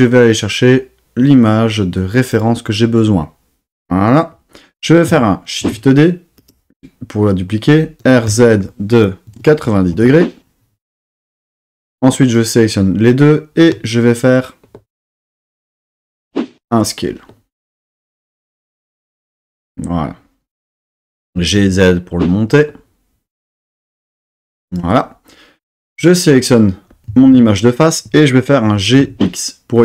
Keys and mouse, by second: 5.6 shift+d, 6.3 click, 8.0 r, 8.3 z, 9.2 KP_9, 9.3 KP_0, 9.9 KP_Enter, 11.8-12.4 drag, 13.7 s, 19.4 click, 21.3 g, 21.6 z, 24.6 click, 25.7 click, 28.7 g, 29.0 x.